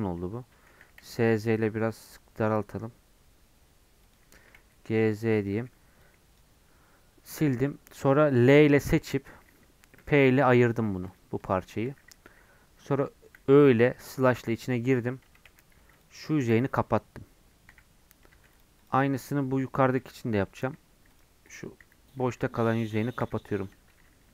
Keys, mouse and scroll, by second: 0.0-0.8 scroll up 1, 0.8 s, 10.9 Tab, 11.1-13.4 drag, 13.4 /, 13.9-15.3 middle drag, 15.3 Tab, 16.0 click, 16.4 f, 17.7 /, 18.3 Tab, 18.5 click, 19.0 Tab, 20.0 /, 20.5 middle click, 21.2 click, 21.6 click, 21.8 f, 23.2 /, 23.8 Tab, 24.0-24.3 scroll down 2.